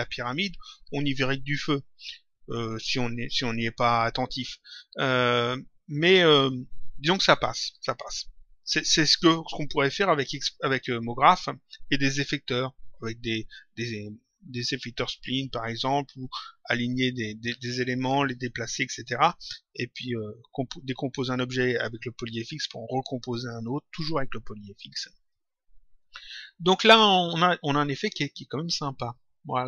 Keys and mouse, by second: 26.7 click, 27.9 click.